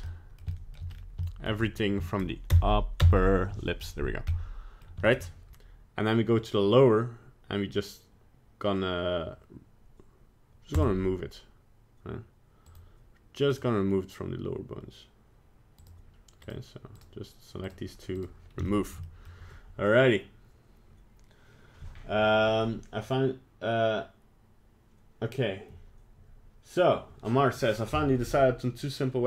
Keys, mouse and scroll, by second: 0.1 middle click, 0.5 middle click, 0.5 shift+middle click, 0.7 shift+middle click, 0.9 scroll up 3, 1.2 shift+middle click, 2.5 ctrl+KP_Add, 3.0 ctrl+KP_Add, 4.3 middle click, 4.5 middle click, 4.8 middle click, 5.0 shift+middle click, 5.2 shift+middle click, 10.7 click, 12.7 click, 13.5 click, 15.8 click, 16.4 click, 17.0 click, 17.6 click, 18.2 click, 18.7 shift+middle click, 19.0 middle click.